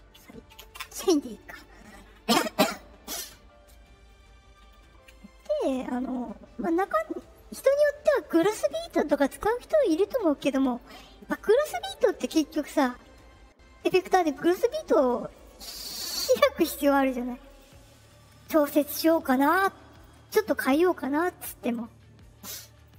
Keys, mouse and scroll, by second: 5.0 middle click, 5.0-5.4 scroll up 2, 5.7 middle click, 5.7 scroll up 2, 14.2 click, 15.3 click, 16.1 click, 17.4 click, 18.8 click, 19.8 click, 22.8 click.